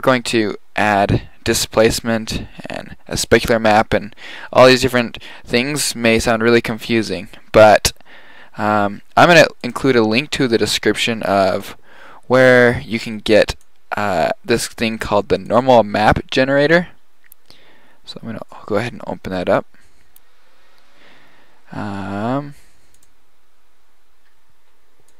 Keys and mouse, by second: 0.6-3.7 middle drag, 5.6 middle drag.